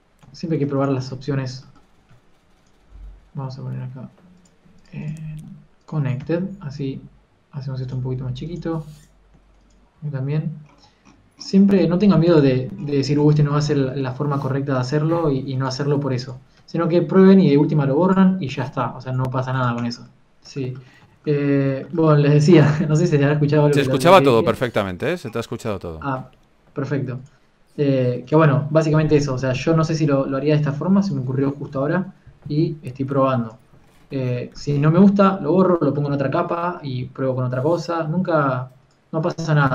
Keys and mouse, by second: 0.4 Tab, 0.8 Tab, 2.9 s, 8.5 click, 10.6 s, 13.2 s, 16.3-18.7 right drag, 17.3 s, 19.1 s, 22.0 Tab, 23.5 right click, 25.2 s, 37.7 KP_3, 38.2 g.